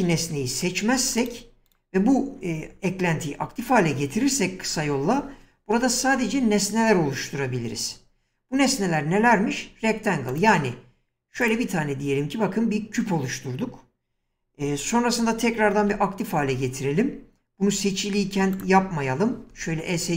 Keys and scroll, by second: 0.2 <, 15.8 ctrl+x, 19.5 Escape.